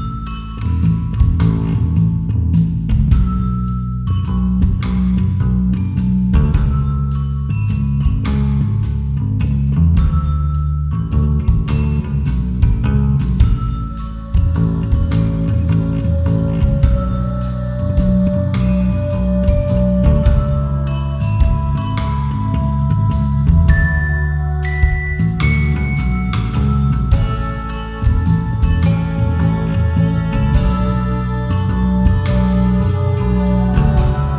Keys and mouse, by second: 1.3 Tab, 3.0-4.8 drag, 6.5 click, 7.1-9.1 drag, 10.2 click, 12.6-13.6 drag, 14.0 Tab, 14.8 1, 15.9 a, 16.3 s, 16.5 z, 17.0 KP_0, 17.6 KP_Enter, 18.8 KP_7, 22.2 Tab, 23.2 KP_7, 24.4 shift+d, 24.9 g, 25.2 y, 28.0 click, 28.2-29.5 typing, 30.3 KP_Enter, 31.9 shift+click, 33.5 Tab.